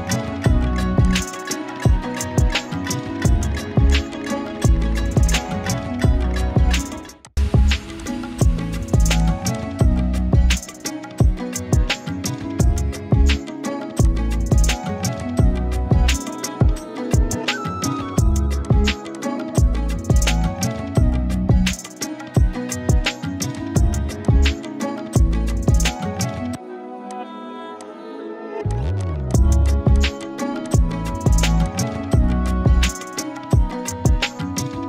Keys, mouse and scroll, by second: 2.5-3.7 scroll up 1, 4.2-4.8 shift+drag, 7.7 z, 7.9-9.5 click, 8.4-8.9 z, 9.0 space, 9.2 click, 9.3 z, 9.5 click, 10.5 Up, 12.9 click, 13.1 z, 13.3 click, 13.5 z, 13.7 click, 13.9 space, 14.1 click, 21.8 click, 24.8-26.6 typing, 25.1 click, 25.5 click, 25.8-27.0 click, 27.0 click, 28.2 scroll up 1, 28.4-31.0 typing, 28.7 click, 29.0 click, 29.3 click, 29.7 click, 30.0 click, 30.2 click, 30.6 click, 31.7 click, 33.2 ctrl+z, 33.9-34.5 click, 34.5 ctrl+z.